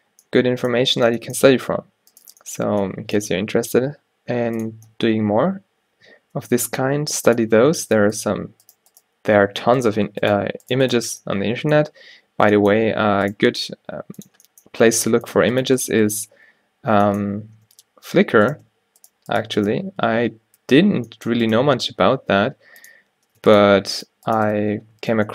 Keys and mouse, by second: 3.6 e, 6.8 e, 9.7 f, 11.2 f, 13.7 e, 14.9 e, 16.4 f, 17.8 ctrl+z, 19.5-21.7 drag, 20.7 f, 21.7 g, 23.0 click, 23.6-25.0 drag, 24.6 f, 25.1 Tab.